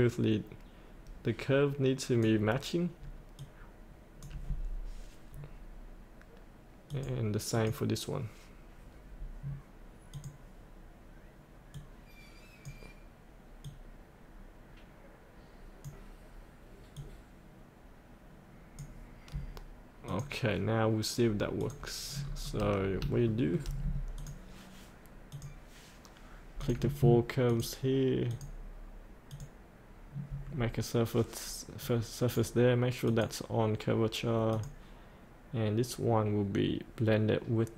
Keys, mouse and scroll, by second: 5.3-6.9 scroll down 1, 6.9 click, 11.0-19.3 drag, 22.2-22.8 scroll up 1, 24.1 click, 27.5 ctrl+click, 28.3 ctrl+click, 29.2-31.8 ctrl+drag, 31.8 right click, 33.0 click.